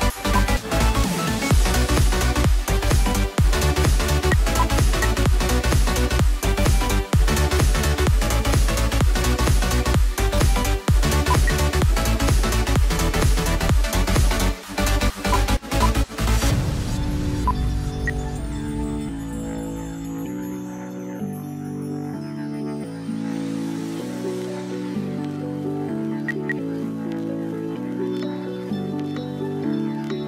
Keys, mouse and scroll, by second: 4.1-4.8 typing, 4.5 shift+click, 11.1-11.9 typing, 17.3-17.8 typing, 17.5 shift+click, 18.9 double click, 21.3 right click, 25.9-26.7 typing, 29.3 right click.